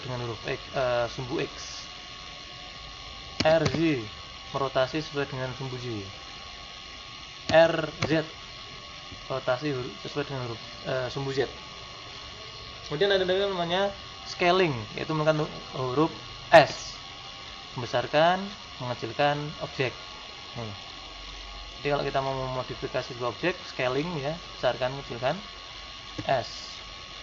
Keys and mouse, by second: 20.8 middle click, 24.8-26.1 middle drag, 26.1 s.